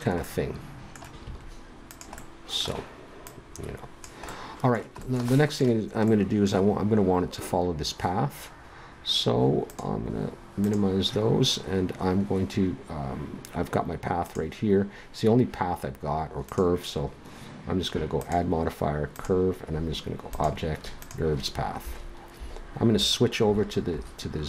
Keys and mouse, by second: 1.2 s, 9.6-12.4 drag, 12.4 middle click, 14.2-15.8 drag, 18.2-20.0 drag, 20.0 middle click.